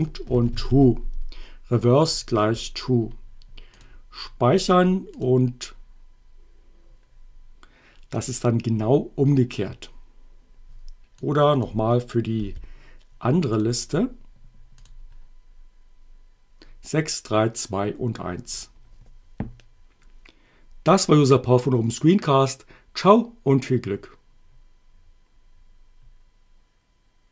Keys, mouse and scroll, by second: 0.0-1.2 typing, 3.8 click, 5.2 click, 8.3 click, 11.2 click, 12.4 y, 13.6 click, 14.9 click, 18.6 click.